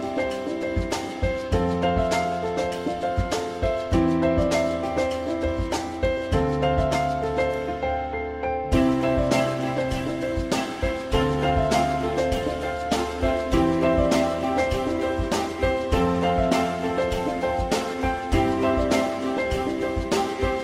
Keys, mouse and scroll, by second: 3.3 shift+click, 5.4 alt+middle click, 13.4 F3, 14.2 alt+middle click, 16.8 alt+click, 18.1 alt+click, 19.1 F3.